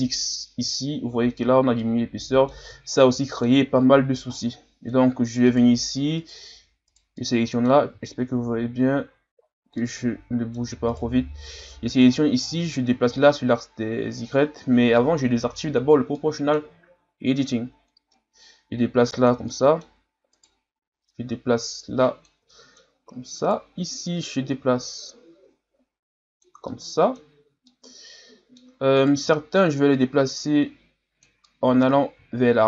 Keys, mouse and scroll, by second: 2.9-3.2 scroll down 5, 3.2 middle click, 3.6-4.1 scroll up 3, 4.1 ctrl+scroll down 5, 4.4-5.5 middle drag, 5.5 right click, 6.9 right click, 7.2 middle click, 8.0-8.6 shift+scroll up 4, 9.4-9.8 ctrl+scroll up 1, 9.8-11.1 middle drag, 11.1 right click, 12.0 click, 13.0 ctrl+z, 15.4 o, 16.1-17.9 middle drag, 17.9-19.5 drag, 19.5-20.3 scroll up 1, 20.3 right click, 21.1-22.5 drag, 22.5 middle click, 23.4 right click, 24.1-26.7 drag, 26.7-29.0 middle drag, 29.0 right click, 29.3 middle click, 29.9-31.5 drag, 31.5-32.6 middle drag.